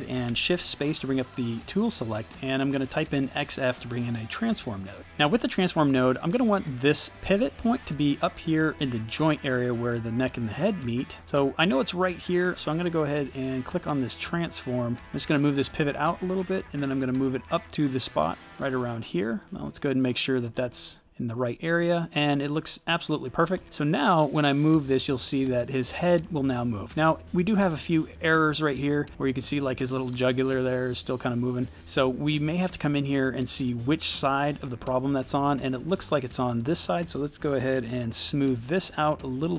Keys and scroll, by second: 0.2 shift+space, 2.6 x, 3.1 f, 4.5 Return, 38.0 shift+s.